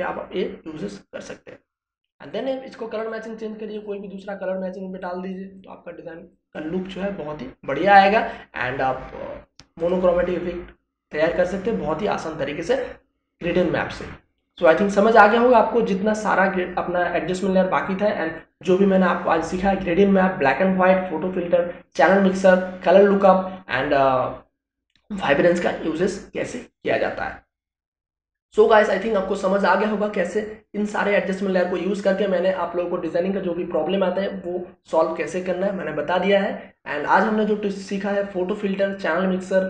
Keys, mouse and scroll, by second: 3.3-10.8 drag, 13.7 click.